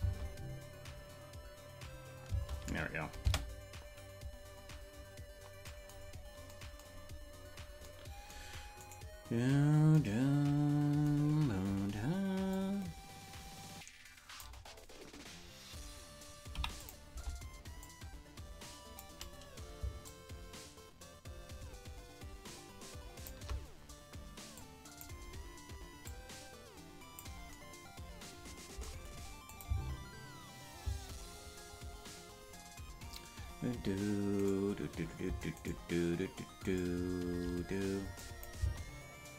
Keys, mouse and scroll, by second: 2.2 space, 4.0 space, 6.0-6.4 scroll down 2, 6.1-6.8 scroll up 4, 6.8-9.0 scroll down 7, 9.1 right click, 12.5-14.4 drag, 16.7 i, 17.8-19.0 drag, 20.0-23.3 shift+drag, 24.5 click, 26.0-27.2 drag, 29.4-31.2 drag, 29.6 space, 30.8 space, 34.7 right click, 35.8 shift+right click, 38.1 click, 38.5 space.